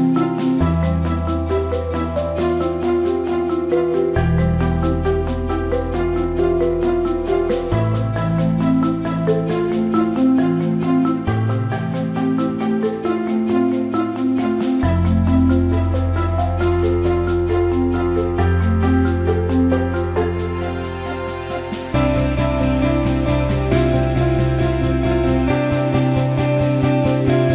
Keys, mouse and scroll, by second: 1.8 click, 16.4-17.6 drag, 18.0 click, 18.9-19.3 drag, 19.4 alt+middle click, 20.2 ctrl+s, 20.8 alt+middle click, 21.7-22.7 alt+middle drag, 23.2 click.